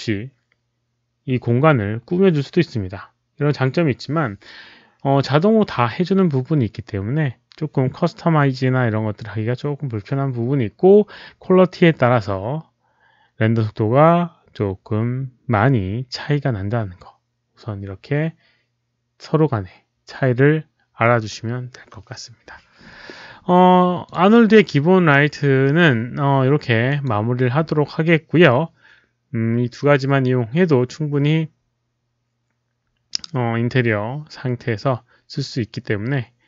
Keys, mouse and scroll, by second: 24.0 click, 26.8 click.